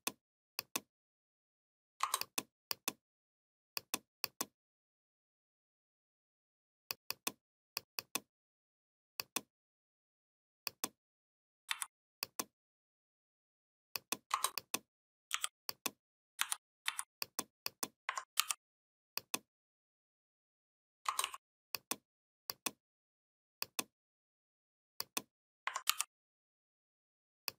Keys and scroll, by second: 11.5 v, 15.1 i, 16.2 c, 16.7 v, 18.2 ctrl+g, 25.7 ctrl+g.